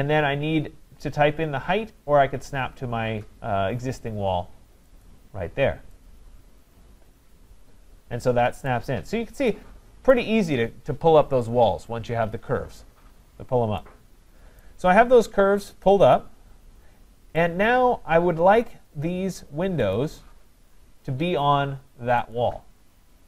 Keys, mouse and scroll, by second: 5.0 click, 8.7 right click, 9.1-9.5 scroll, 10.1 right click, 13.3 scroll, 14.6 right click, 14.9-15.7 scroll, 17.4 right click, 18.1-19.6 scroll, 19.6 scroll, 19.9 click, 22.4 click.